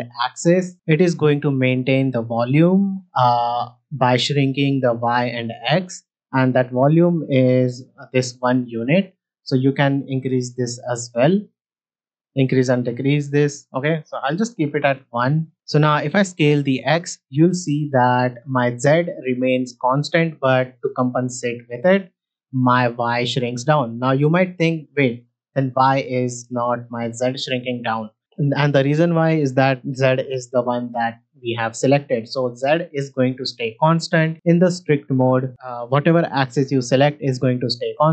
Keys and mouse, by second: 0.7 z, 9.1-13.1 drag, 13.6-14.8 drag, 16.1 s, 16.2 x, 32.4 middle drag, 37.6 middle drag.